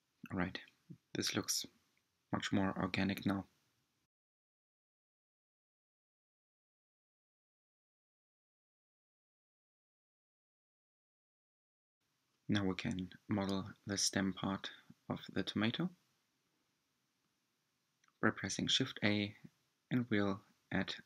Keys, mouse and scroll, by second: 5.1 scroll down 1, 5.3-9.7 shift+middle drag, 10.3-10.9 scroll down 2, 11.3 click, 11.5-12.4 scroll down 3, 12.4-13.8 middle drag, 13.8 click, 14.2-16.1 shift+middle drag, 16.1-17.4 scroll up 4, 17.4 shift+a.